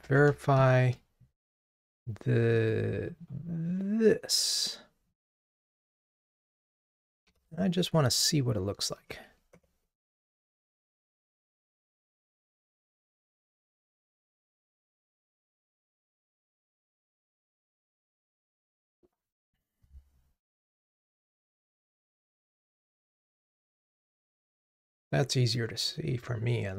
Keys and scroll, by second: 5.5 super+c, 7.3 super+c, 7.5 super+v, 9.6 super+BackSpace, 11.3 ctrl+r.